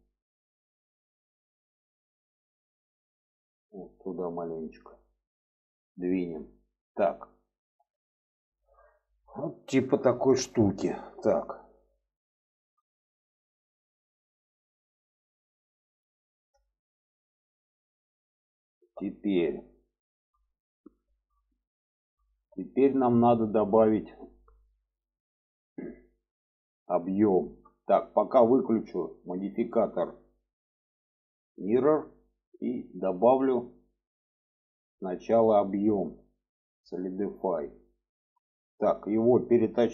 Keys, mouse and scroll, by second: 0.7 click, 1.6 shift+middle click, 2.3 click, 2.6 click, 3.7-4.8 drag, 5.1 click, 6.4 middle click, 7.2 alt+middle click, 8.3 shift+middle click, 9.2 shift+middle click, 10.1 shift+middle click, 11.4 click, 12.7-15.8 middle drag, 16.2 middle click, 17.8 click, 18.2 alt+middle click, 19.7 shift+middle click, 20.7 shift+middle click, 21.6 shift+middle click, 22.4-24.1 middle drag, 26.6 shift+middle click, 31.4 click, 32.0 middle click, 32.6 middle click, 33.4 middle click, 34.9-37.3 drag.